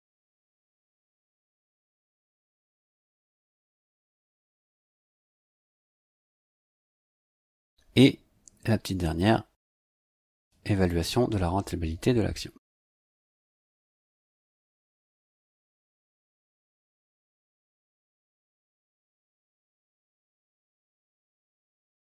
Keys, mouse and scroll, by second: 0.1 click, 1.6 click, 3.0 click, 4.5 KP_5, 4.9 KP_Subtract, 5.2 space, 6.5 click, 9.6-11.1 drag, 11.9 ctrl+c, 12.9 ctrl+click, 13.2 ctrl+v, 14.7 click, 15.7 click, 17.6 KP_6, 18.7 KP_Subtract, 18.9 space, 20.4 click, 21.9-22.0 typing.